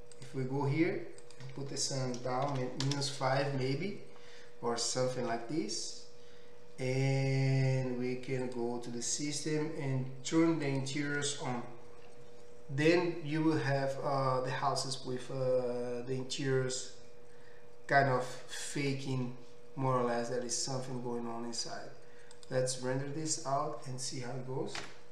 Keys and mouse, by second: 0.7 middle click, 1.3-8.6 drag, 8.6-10.7 middle drag, 10.7-25.1 drag, 21.7 z.